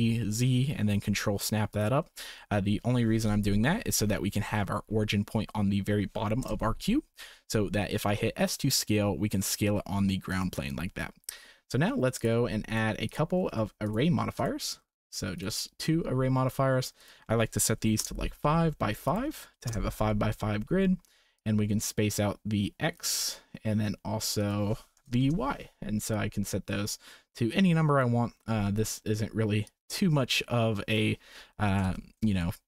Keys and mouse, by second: 2.5 Tab, 3.2 KP_1, 6.4 KP_0, 8.0 s, 12.1 click, 12.7-13.9 drag, 13.5 r, 14.4 click, 16.9-18.0 drag, 19.1 click, 21.3-23.0 drag, 24.3 click, 26.1-28.0 drag, 29.6-30.9 drag, 31.6 g.